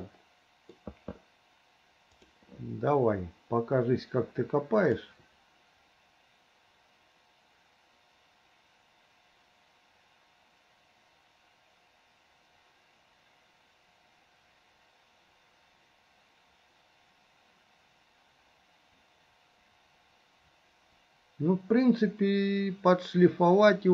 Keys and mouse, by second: 0.4 click, 4.8 click.